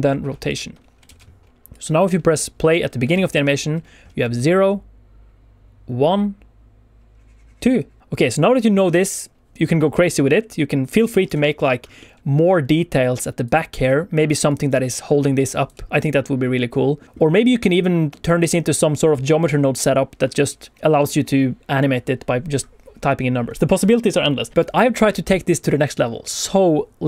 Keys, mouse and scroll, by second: 1.0 alt+a, 1.6 click, 3.1 alt+shift+z, 4.1 space, 7.9 space, 8.0 click, 11.7 scroll up 1, 11.9 middle click, 12.4 middle click, 13.1 d, 13.4 click, 13.6-15.6 d, 14.1 click, 14.1 d, 14.4 click, 14.8 right click, 14.8 d, 15.8 middle click, 16.9 scroll up 1, 17.0 click, 17.3 middle click.